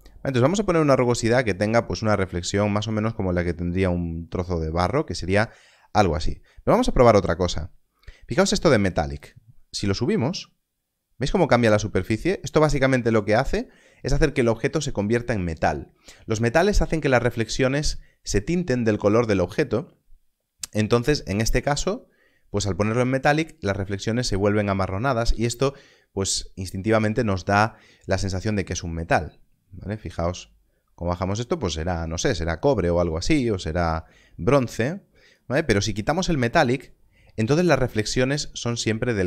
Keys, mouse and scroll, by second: 30.0 click.